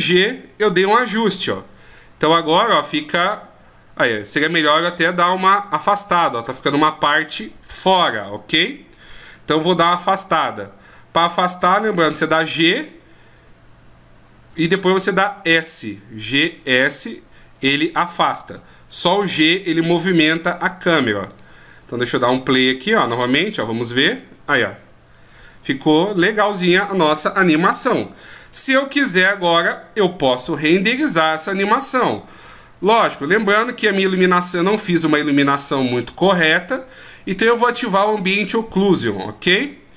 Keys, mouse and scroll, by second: 2.4 click, 9.7 click, 12.1 g, 18.5 g, 22.7 click, 28.6 click, 33.4 right click.